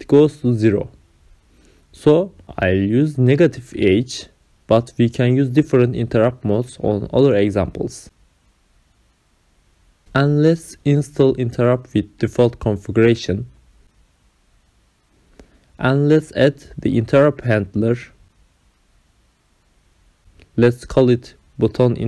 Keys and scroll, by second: 0.6 space, 1.1 Return, 1.7 Up, 9.4 BackSpace, 9.5 ctrl+v, 11.9 ctrl+c, 13.3 ctrl+v, 16.2 Caps_Lock, 18.7 ctrl+c, 20.3 Return.